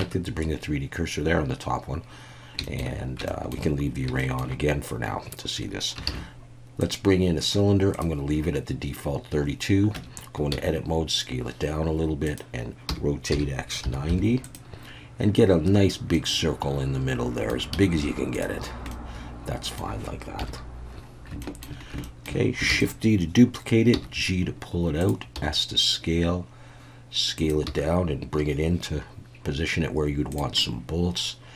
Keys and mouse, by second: 0.0 Tab, 2.6 shift+middle click, 3.3 shift+middle drag, 4.2 shift+middle click, 6.1 shift+a, 9.9 Tab, 10.5 s, 12.2 click, 12.9 r, 13.3 x, 13.8 9, 14.1 0, 14.4 click, 16.1-17.5 middle drag, 17.7 s, 18.3 click, 18.9 middle click, 20.4 KP_1, 21.4 shift+click, 22.0 shift+middle click, 22.7 shift+d, 22.8 click, 23.9 g, 25.0 click, 25.3 s, 27.4 click, 27.6 g, 30.3 click, 30.6-31.5 middle drag.